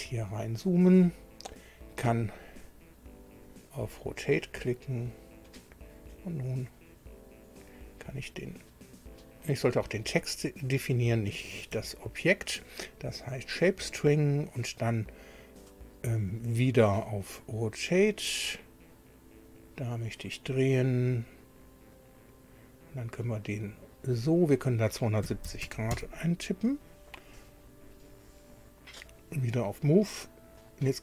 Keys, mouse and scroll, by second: 0.5 scroll down 1, 3.3 click, 5.5 click, 7.6 click, 9.6 right click, 11.2 Escape, 11.7 Escape, 13.3 click, 17.9 click, 19.5 click, 21.9 click, 25.2 KP_2, 25.4 KP_7, 25.6 KP_0, 25.9 KP_Enter, 29.1 click, 30.6 click.